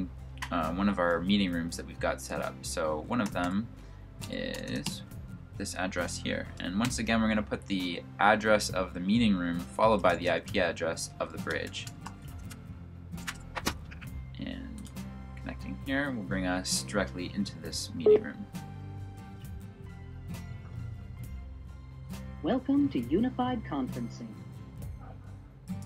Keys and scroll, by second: 3.1-5.2 typing, 6.6 typing, 9.5-13.8 typing.